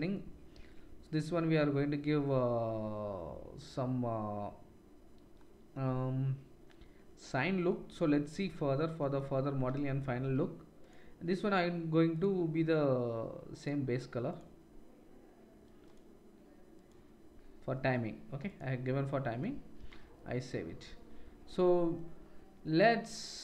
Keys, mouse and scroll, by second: 11.9 click, 14.3-15.9 drag, 18.5-23.4 drag.